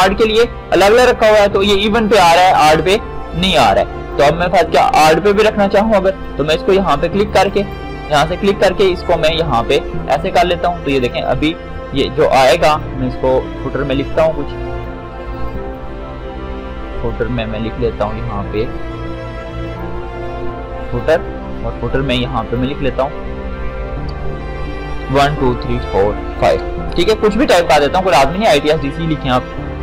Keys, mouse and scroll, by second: 1.9-7.5 drag, 7.8-19.9 drag, 24.4-26.8 typing, 28.2 click.